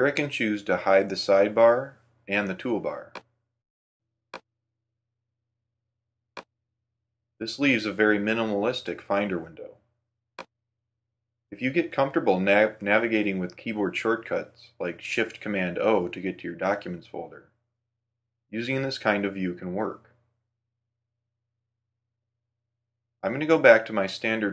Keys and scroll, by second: 17.6 shift+super+o, 21.0 shift+super+d, 24.2 shift+super+o.